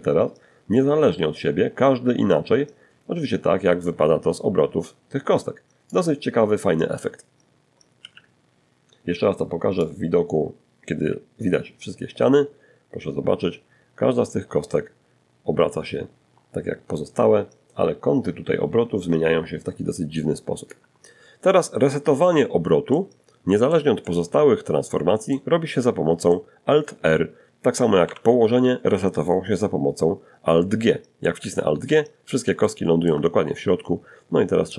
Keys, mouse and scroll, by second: 6.2 z, 8.0-19.1 drag, 21.1-22.1 middle drag, 22.2-23.7 middle drag, 24.0 middle click, 26.2 alt+r, 30.0 alt+g, 30.8 alt+shift+middle click, 33.1 click, 33.5 g, 33.9 click, 34.4 right click.